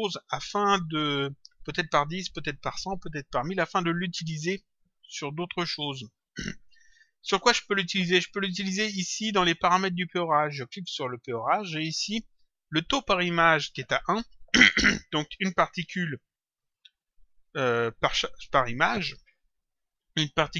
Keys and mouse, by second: 1.4 click, 8.6 click, 10.4 click.